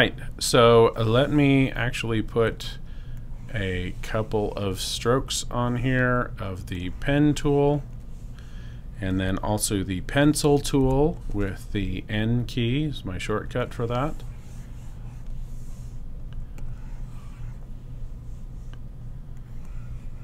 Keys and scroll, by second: 10.1 n.